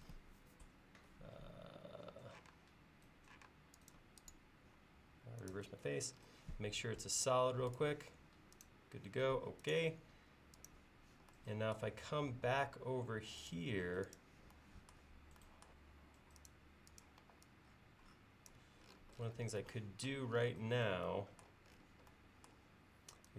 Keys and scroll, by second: 2.5 space, 12.3-13.4 typing, 17.2 e.